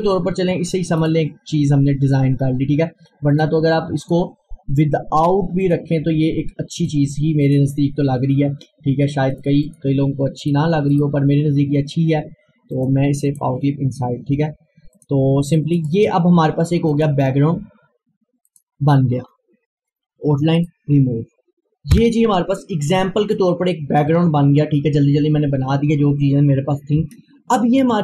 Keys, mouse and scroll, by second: 1.0 right click, 3.3 click, 10.9 right click, 12.8 click, 15.8 right click, 16.9 click, 20.6 right click, 21.9 F4.